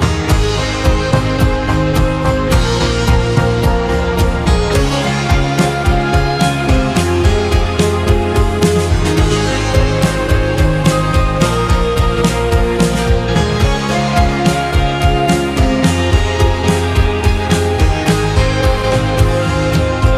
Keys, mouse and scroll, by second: 0.8 r, 4.7 r, 8.3 s, 11.6 Tab, 11.9 Tab, 14.6 r.